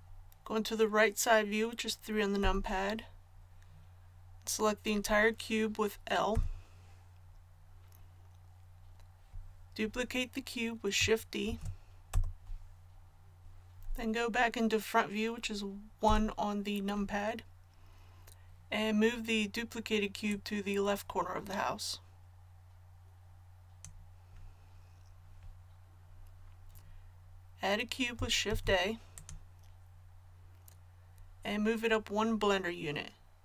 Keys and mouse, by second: 2.4 KP_3, 6.3 l, 11.5 shift+d, 16.0 KP_1, 20.3-28.5 drag, 28.5 shift+a.